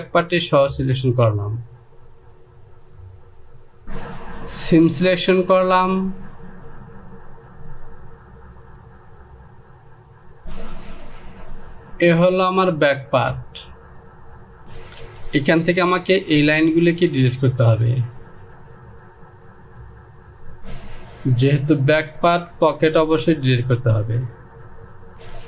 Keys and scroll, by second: 14.6 Home, 15.7 Delete.